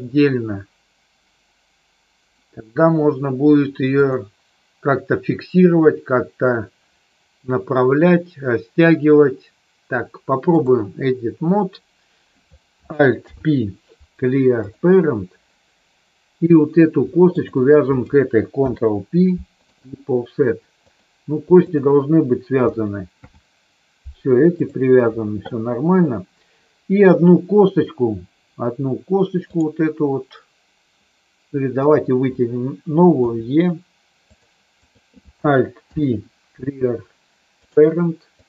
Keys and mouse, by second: 4.1-10.7 drag, 13.1 alt+p, 17.2 shift+click, 18.6 ctrl+p, 20.8 click, 23.1 ctrl+p, 29.6 click, 31.8 click, 33.2 e, 34.2 click, 34.8 click, 35.8 alt+p, 38.3-38.4 drag.